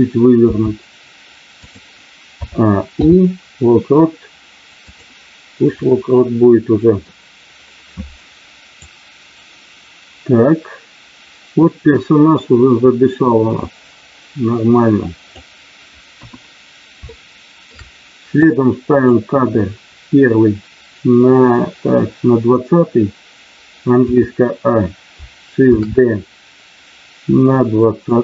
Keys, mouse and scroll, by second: 0.5 r, 1.6 click, 2.3 a, 3.0 i, 5.7-7.0 middle drag, 8.7-15.4 drag, 16.1 KP_1, 17.1 shift+middle click, 18.4 click, 25.6 shift+d, 28.0 click.